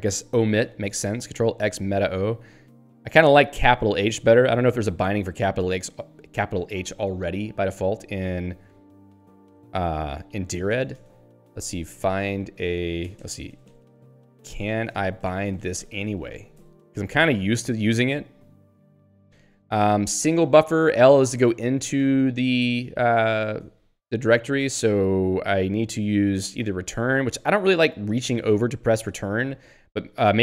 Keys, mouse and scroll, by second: 4.6-5.0 scroll up 3, 6.0 click, 6.2 click, 8.4 click, 9.0 ;, 10.4 End, 10.7-13.0 typing, 14.2-17.1 typing, 17.3 ctrl+s, 17.5 Down, 18.4 Home, 19.1 Right, 22.0 ;, 23.9 Up.